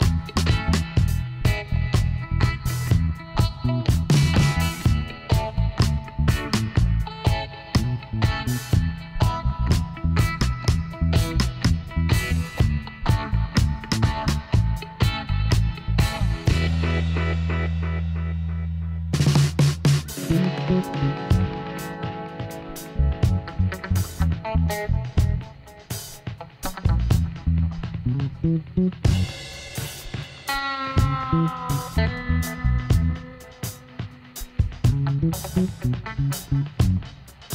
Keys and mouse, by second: 0.7-2.3 drag, 1.7 ctrl+r, 2.9-4.7 drag, 5.6 s, 6.8-8.8 middle drag, 7.5 Tab, 8.4 z, 12.3 middle click, 12.9-14.1 drag, 14.3 middle click, 15.3 Tab, 15.9 middle click, 16.5 middle click, 18.7-19.9 drag, 19.7 Tab, 19.9 middle click, 21.0 a, 23.1 middle click, 27.6 click, 28.3 Tab, 28.6 middle click, 30.2 KP_7, 30.9 middle click, 33.5-35.9 middle drag, 35.9 right click, 36.8 middle click, 37.4 e.